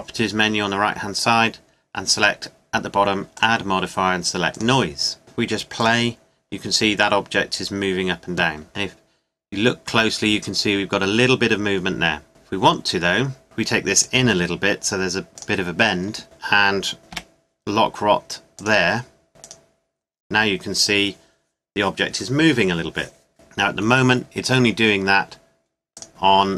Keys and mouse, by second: 3.3-5.0 drag, 8.7-11.2 middle drag, 15.3 g, 17.1 i, 19.5-21.3 drag, 26.0-26.5 drag.